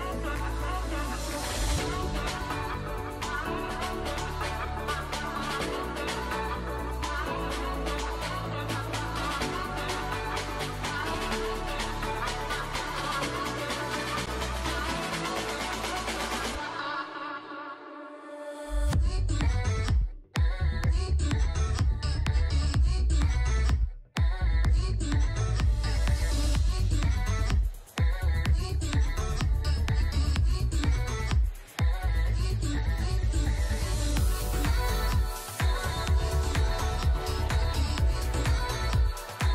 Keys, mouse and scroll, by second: 6.0-6.5 alt+scroll up 1, 7.4-7.8 alt+scroll up 1, 9.0-9.5 alt+scroll up 1, 9.6-10.3 alt+scroll down 1, 20.7 alt+scroll down 1, 33.7-34.4 alt+scroll down 1, 34.4 double click.